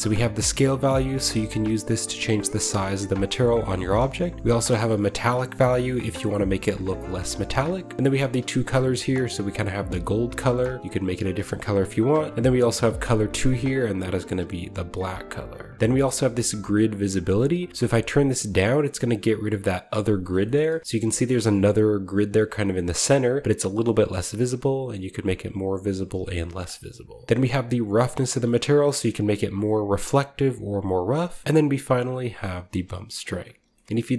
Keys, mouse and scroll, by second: 3.6 shift+middle click, 4.3-7.4 drag, 7.9 click, 8.5-11.4 drag, 11.4 middle click, 12.5 click, 13.6-14.9 drag, 14.9 middle click, 15.7-16.7 scroll down 2, 17.3-20.1 drag, 20.1 middle click, 20.4-22.2 shift+middle drag, 20.6-23.4 shift+scroll up 1, 26.5 middle click, 26.8-27.3 scroll down 1, 27.3-31.0 shift+drag, 31.3 shift+middle click, 31.4-33.2 drag, 33.5-33.9 scroll down 2, 33.7 shift+middle click.